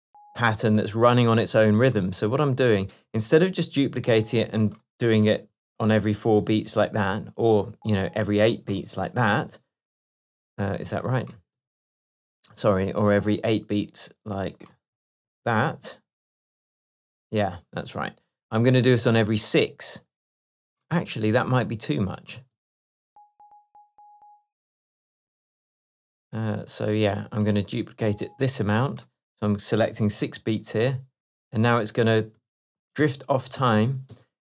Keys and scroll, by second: 5.3 super+d, 7.2 BackSpace, 9.1 super+d, 11.6 BackSpace, 15.3 super+d, 18.8 BackSpace, 22.5 space, 25.4 space, 30.9 super+d.